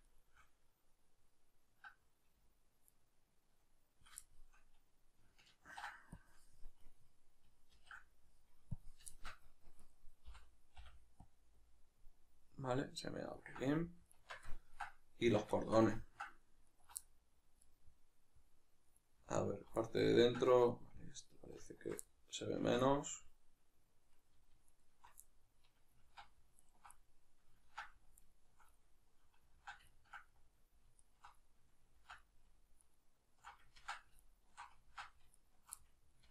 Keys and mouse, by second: 0.1-3.0 shift+right drag, 4.3-6.8 shift+middle drag, 5.6 ctrl+e, 6.8 right click, 7.7 ctrl+e, 9.1-9.8 shift+middle drag, 9.8 right click, 13.3-16.7 ctrl+middle drag, 14.2 Tab, 15.3 Tab, 16.7-17.0 alt+right drag, 17.0-19.3 middle drag, 19.3-19.8 alt+right drag, 19.8-21.7 middle drag, 21.7-22.1 alt+shift+right drag, 22.1-24.7 middle drag, 22.6 ctrl+z, 24.7-25.2 alt+shift+right drag, 25.2-26.6 middle drag, 26.0 ctrl+z, 26.6-27.0 alt+shift+right drag, 27.0-28.2 middle drag, 27.6 ctrl+z, 28.2-28.8 alt+shift+right drag, 28.8-31.0 middle drag, 29.6 ctrl+z, 31.0 alt+shift+right click, 31.4-32.8 middle drag, 32.0 ctrl+z, 32.8 alt+shift+right click, 33.8 ctrl+z, 34.2 alt+shift+right click, 34.9 ctrl+z, 35.3 alt+shift+right click, 35.8-36.3 middle drag.